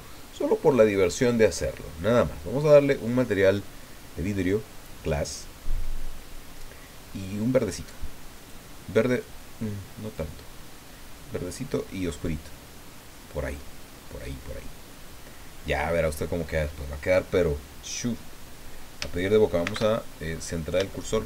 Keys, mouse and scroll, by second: 0.7 click, 5.2 click, 8.3 click, 10.0 click, 11.4-11.9 scroll down 1, 12.1-13.1 scroll down 4, 19.6 shift+c, 20.2-20.6 shift+scroll up 3, 20.9 shift+click.